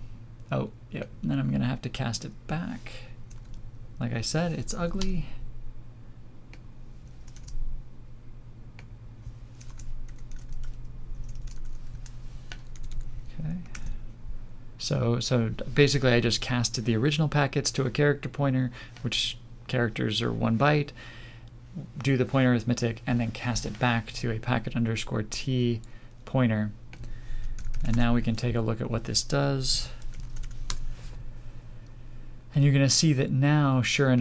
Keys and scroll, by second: 13.7 ctrl+s.